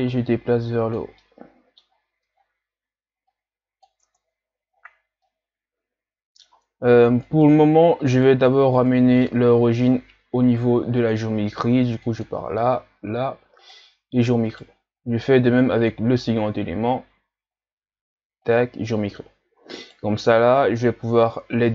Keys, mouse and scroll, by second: 1.2 middle click, 1.9-2.3 scroll down 2, 2.3-3.3 scroll up 6, 3.3 click, 4.1 Tab, 4.9-5.3 scroll down 1, 5.3-7.2 middle drag, 7.2 right click, 8.1 right click, 8.7 ctrl+scroll up 1, 9.2-11.0 middle drag, 11.0-14.0 drag, 14.5 right click, 15.8-18.8 drag, 19.8 right click, 20.5 shift+right click.